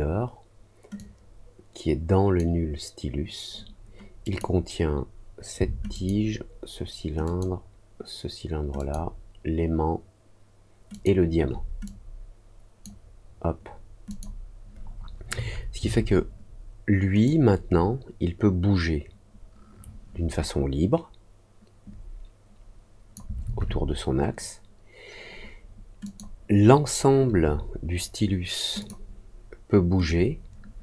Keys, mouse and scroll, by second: 0.9-2.3 drag, 4.2 click, 5.9 shift+click, 7.2 shift+click, 8.7 shift+click, 10.8 shift+click, 11.8-12.8 drag, 14.0 click, 17.2-23.1 drag, 26.0 click, 28.7 click, 30.0-30.8 drag.